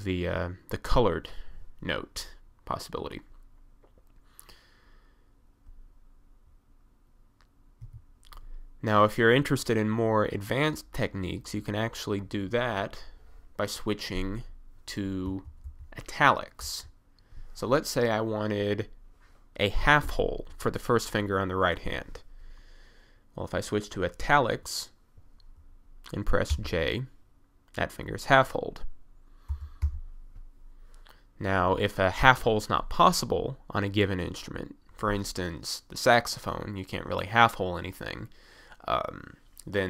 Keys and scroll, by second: 7.9 1, 15.3 f, 15.7 d, 16.9 s, 26.6 j, 29.5 k, 29.9 l.